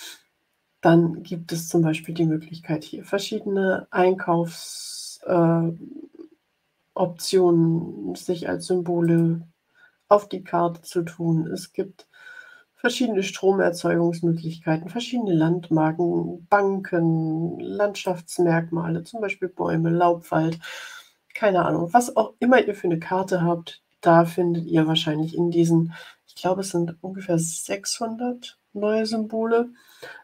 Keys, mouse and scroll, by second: 1.8 click, 2.9-3.9 scroll down 1, 3.9-4.8 scroll down 3, 5.0-6.4 scroll up 6, 8.9 click, 11.8-12.1 scroll up 2, 13.7 scroll up 2, 15.1 scroll up 1, 16.7 scroll up 1, 17.8 click.